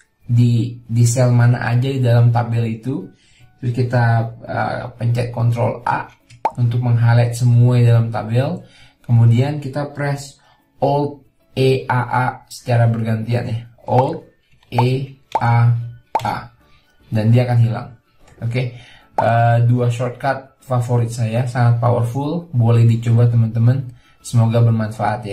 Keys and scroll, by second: 6.3 ctrl+a, 14.7 alt+e, 15.2 a, 16.0 a.